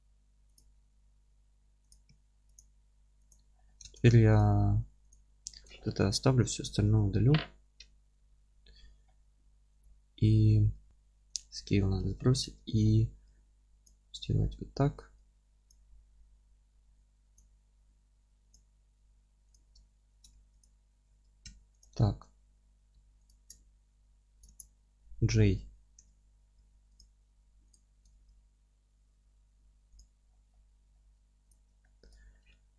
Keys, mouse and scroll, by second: 0.5 click, 0.7 g, 1.9 click, 2.1 s, 2.5 click, 2.8 g, 3.3 click, 3.5-3.8 scroll down 1, 3.8 Tab, 4.3 click, 4.7 3, 5.1 click, 6.8 ctrl+i, 9.2-9.8 scroll up 1, 9.8 click, 10.9 Tab, 11.3 ctrl+a, 12.0 Tab, 12.4 1, 12.7-13.5 scroll up 1, 13.8 click, 14.3 f, 14.9 3, 15.7 click, 16.7 2, 17.3-18.5 drag, 18.1 3, 19.8 alt+middle click, 20.3 2, 20.6 click, 21.1 ctrl+x, 21.4 1, 21.8 click, 22.0-23.2 alt+middle drag, 23.2 ctrl+click, 23.7 f, 24.4 ctrl+z, 26.5 2, 26.9 click, 27.4 3, 27.7 click, 28.1 ctrl+x, 29.2 1, 29.7 2, 29.9 click, 30.2 scroll down 1, 30.5-31.5 middle drag, 30.9 e, 31.5 click, 31.8-32.7 alt+middle drag.